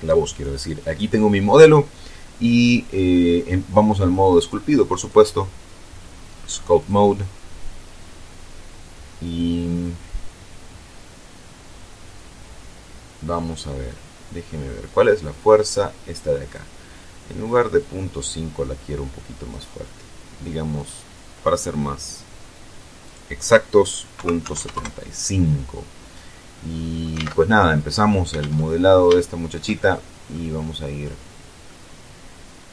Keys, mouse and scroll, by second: 2.0-2.5 scroll down 2, 2.5 scroll down 1, 2.8-3.3 scroll up 2, 3.3 scroll down 2, 4.9 click, 6.7 click, 14.7-16.6 drag, 17.6-19.6 drag, 20.6 click, 22.9 click, 24.0 KP_Decimal, 24.3 KP_7, 24.4 KP_5, 24.6 KP_Enter, 26.4-26.9 scroll up 1, 26.9-27.6 scroll up 1, 27.1 alt+Tab, 28.3 alt+Tab, 29.1-30.3 shift+middle drag, 30.3-30.9 scroll down 2, 30.9 middle click, 32.4-32.7 scroll down 2.